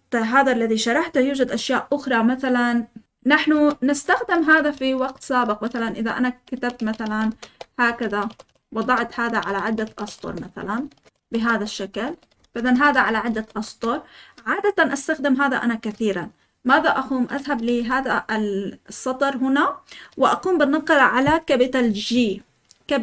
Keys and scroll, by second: 3.5 Escape, 3.6-14.1 typing, 10.8 Escape, 16.7 Escape, 17.4-17.9 typing.